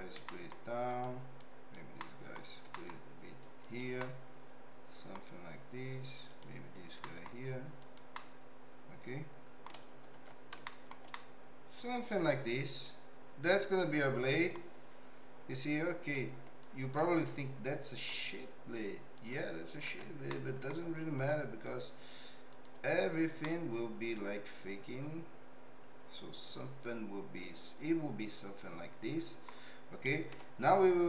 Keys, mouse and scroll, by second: 0.2 g, 1.3 click, 2.0 middle click, 2.6 g, 4.0-5.1 middle drag, 4.0 scroll up 1, 5.1-5.7 scroll down 1, 6.3 click, 6.9 g, 8.1-9.6 middle drag, 10.1 alt+z, 10.7 shift+middle click, 11.1-14.5 middle drag, 16.1 alt+z, 16.6 click, 18.0 x, 19.8 alt+z, 20.3 middle click, 21.2 Tab, 21.7-22.7 right drag, 23.4-29.4 middle drag, 30.3 m.